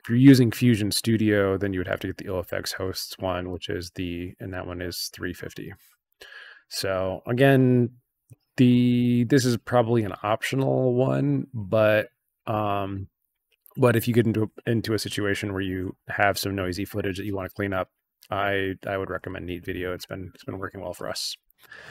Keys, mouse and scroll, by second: 3.5 click, 4.5 click, 5.7 scroll down 1, 17.4 scroll up 1.